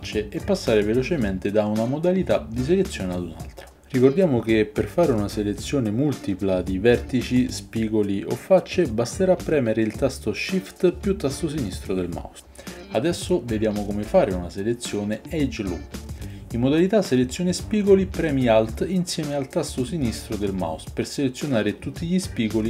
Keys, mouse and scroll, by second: 0.1 click, 1.3 click, 3.7-5.4 shift+middle drag, 5.4 shift+click, 5.6 shift+middle click, 5.9 shift+click, 6.0-7.2 shift+middle drag, 7.2 shift+click, 7.3-8.3 shift+middle drag, 8.3 shift+click, 8.4 shift+right click, 8.8-12.5 shift+middle drag, 21.9-22.6 middle drag.